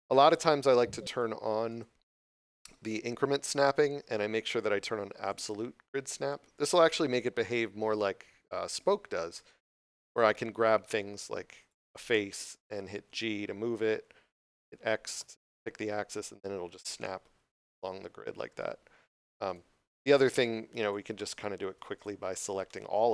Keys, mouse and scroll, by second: 1.0 click, 5.2 click, 9.6 middle click, 10.0 scroll down 1, 10.9 3, 11.5 right click, 13.6 g, 19.4 right click, 21.1 middle click, 22.6 middle click.